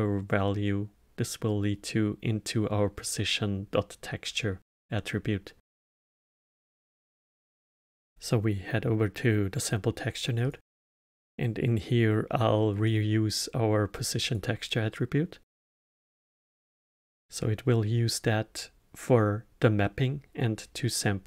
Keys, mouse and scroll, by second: 8.0 click, 10.4-13.5 drag.